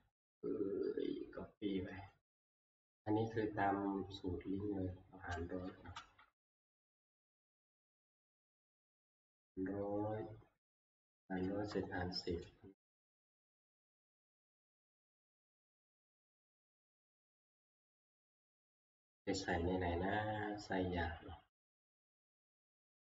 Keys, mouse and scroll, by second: 2.0 click, 6.0 ctrl+c, 11.4 Escape, 15.4 click, 16.3 click, 16.9 scroll, 17.9 click, 17.9 middle click, 22.6 click.